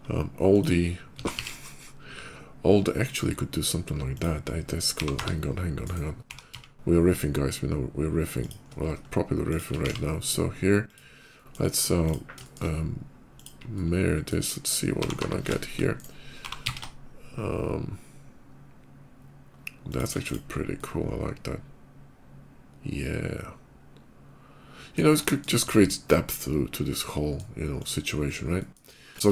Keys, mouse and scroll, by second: 0.2 shift+click, 0.9 s, 1.1 x, 1.3 s, 4.0 click, 5.0-7.1 typing, 5.7 click, 8.2 shift+click, 9.3 shift+click, 9.6 alt+x, 10.7 click, 11.1 middle click, 11.7 click, 12.3 shift+middle click, 13.2 shift+click, 13.4 shift+middle click, 14.8-17.3 typing, 19.7 shift+click, 20.0 shift+click, 20.4-24.8 shift+middle drag, 25.1 shift+middle click, 25.5-27.2 shift+middle drag, 27.6 shift+click, 28.1 scroll down 2, 28.4 middle click, 28.9 click, 29.1 Tab, 29.1 KP_5.